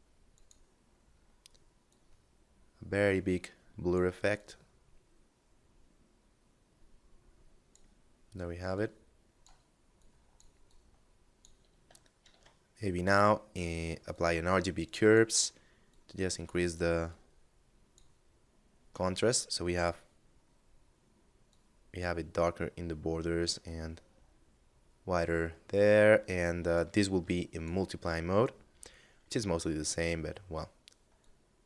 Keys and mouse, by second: 0.2 middle click, 1.1 click, 3.5 click, 7.9 click, 11.3 shift+a, 13.3 click, 18.3 click, 20.7 click, 23.1 middle click, 25.2 middle click, 25.8 click, 27.6 middle click, 30.3 click.